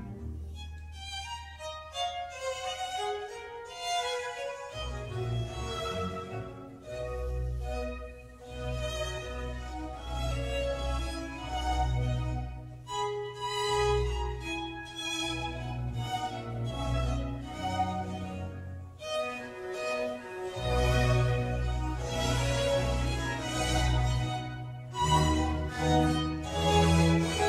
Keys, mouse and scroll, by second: 4.5 click, 5.2 ctrl+r, 8.8-10.0 middle drag, 10.0 click, 10.3 scroll up 2, 10.6-12.3 middle drag, 12.3 scroll up 1, 12.4-13.5 scroll down 2, 13.5 ctrl+r, 18.9 click, 19.2 middle click, 19.5 Tab, 19.8-21.3 middle drag, 21.3 scroll down 1, 21.6-24.6 middle drag.